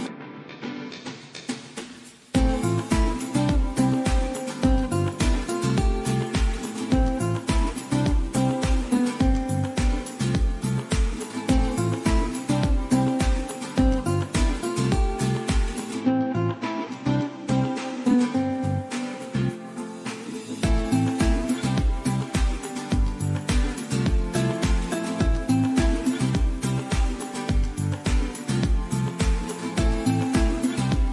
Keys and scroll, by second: 27.4 super+d.